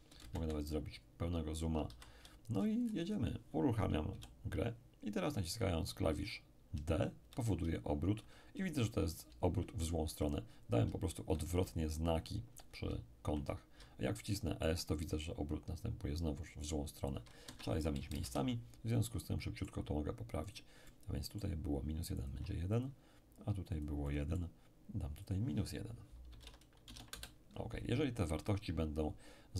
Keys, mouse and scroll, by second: 0.1-0.6 shift+scroll down 1, 0.2 shift+space, 1.0-2.1 shift+scroll up 1, 1.9 shift+c, 2.5-4.1 shift+scroll down 1, 4.1 p, 6.7 d, 7.0 d, 13.8 a, 14.0 a, 17.5 Escape, 18.1 shift+space, 19.0-26.3 shift+drag, 20.5-26.3 middle drag, 22.3 1, 26.1-27.1 typing, 27.1 Return.